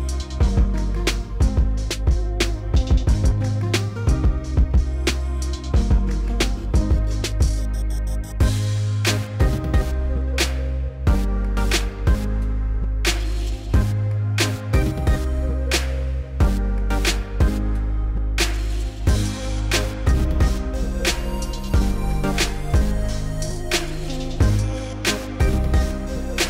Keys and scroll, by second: 1.9 s, 4.6 s, 9.8 s, 14.4 s.